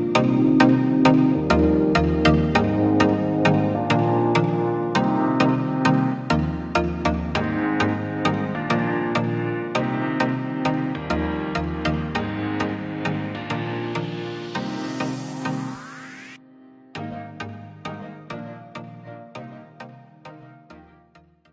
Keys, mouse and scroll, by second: 0.1 F4, 4.5 click, 4.6 click.